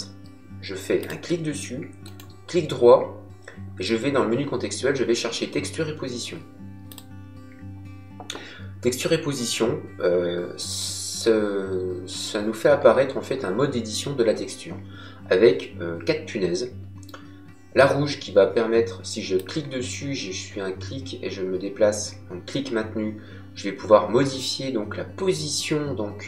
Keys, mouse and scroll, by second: 0.9 click, 2.0 right click, 6.9 click, 19.3 click.